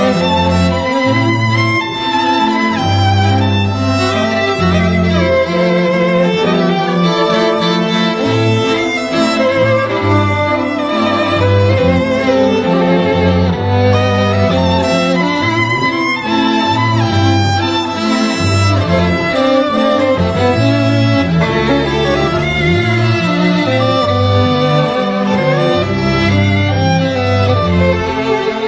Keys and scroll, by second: 9.3 ], 20.1 x, 21.5 [.